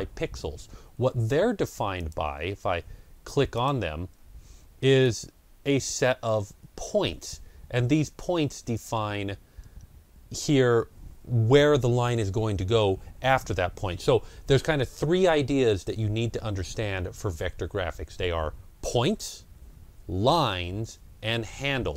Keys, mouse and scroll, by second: 0.1 middle click, 0.2 ctrl+scroll down 1, 1.8 click, 3.4 click, 4.9 click, 5.9 ctrl+scroll up 1, 8.6 click.